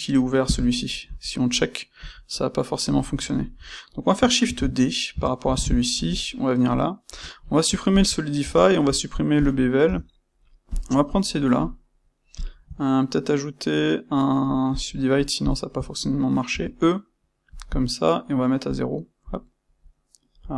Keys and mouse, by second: 1.0 KP_Divide, 1.9 KP_Divide, 4.4 shift+d, 5.1 Escape, 5.9 KP_Divide, 7.0 space, 9.7 Tab, 10.6 click, 10.9-12.3 middle drag, 12.3 shift+click, 12.8-15.4 right drag, 15.4 shift+click, 16.4 e, 17.5 click, 18.6 click, 19.2-20.4 drag.